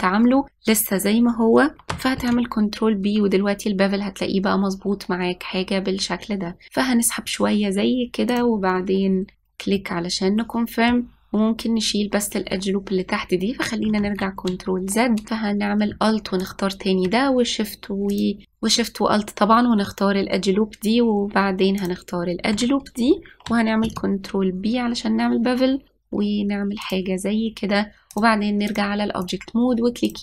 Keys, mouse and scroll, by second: 2.8 ctrl+b, 10.4-13.4 middle drag, 14.7 ctrl+z, 15.3-16.6 middle drag, 17.1 alt+click, 22.4 alt+shift+click, 24.5 ctrl+b, 28.8-29.9 drag, 29.9-30.2 right drag.